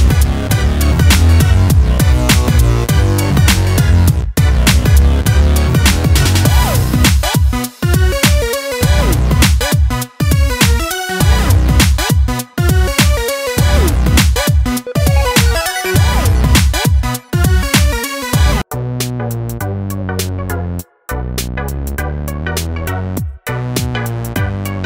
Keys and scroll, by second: 23.3 ctrl+d.